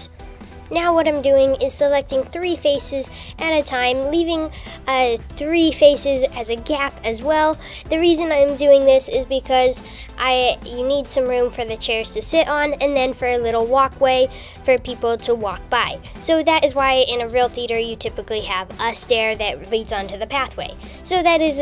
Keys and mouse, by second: 1.5 shift+click, 2.1 shift+click, 7.1 shift+click, 7.6 shift+click, 15.2 shift+click, 16.6 shift+click, 20.0-21.1 shift+drag.